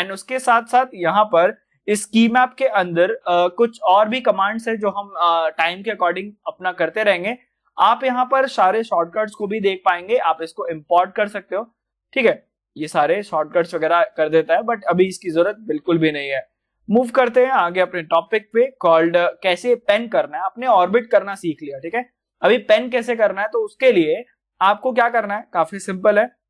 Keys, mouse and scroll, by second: 6.3 click, 11.1 click, 11.2 click, 17.2 click, 17.2 click, 20.0 scroll up 1, 20.6-22.1 middle drag, 22.1 click.